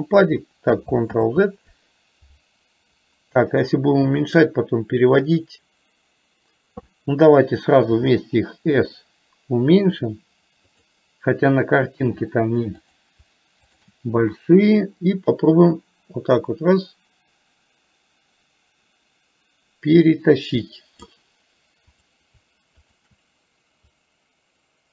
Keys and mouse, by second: 1.2 ctrl+z, 7.9 s, 13.8 shift+click, 14.9-21.2 drag, 21.9 click, 22.9 shift+click, 24.2-24.9 drag.